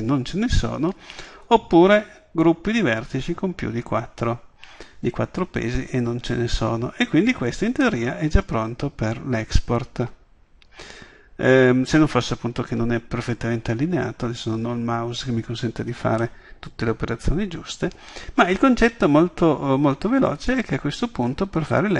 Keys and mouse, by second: 1.3-3.2 drag, 8.3 middle drag, 9.1 middle click, 9.3 middle drag, 16.3-16.8 middle drag, 19.2-20.5 middle drag, 20.5-21.9 drag.